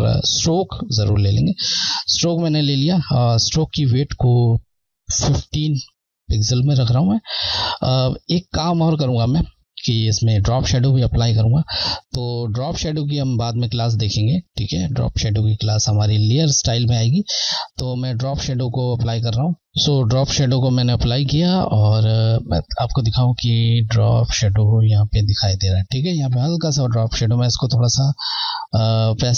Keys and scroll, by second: 1.0 typing, 11.1 Left, 21.6 Left.